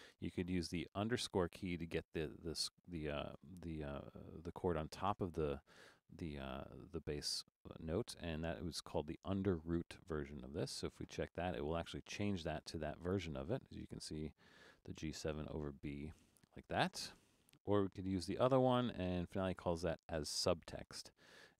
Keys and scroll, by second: 14.8 super+=, 18.2 Return.